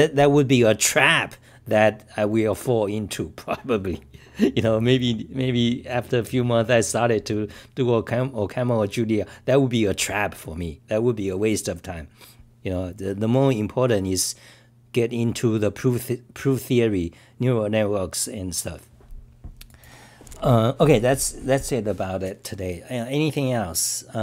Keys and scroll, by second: 8.0-8.8 typing.